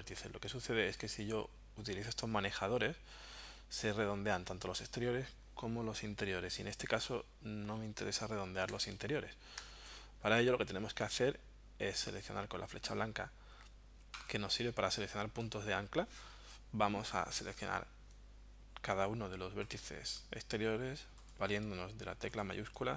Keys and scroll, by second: 6.9 super+z, 8.7 super+z, 9.6 super+z.